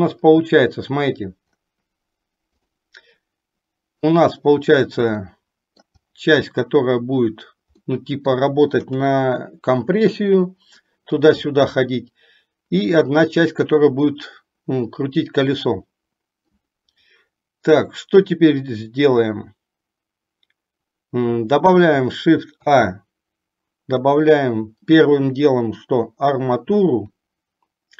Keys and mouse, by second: 5.4-6.2 middle drag, 8.0 middle click, 9.2 KP_3, 22.8 shift+a.